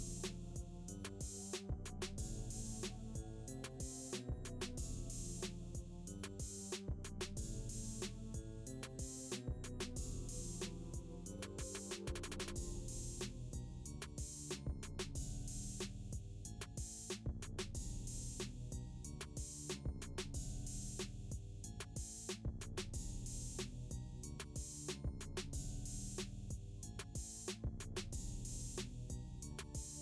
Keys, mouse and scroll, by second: 0.4 scroll up 1, 1.4 click, 9.0 click, 12.5 click, 15.1 click, 19.8 click, 22.6 click, 22.6 click, 25.1 click, 27.4 typing, 29.1 click, 29.4 typing.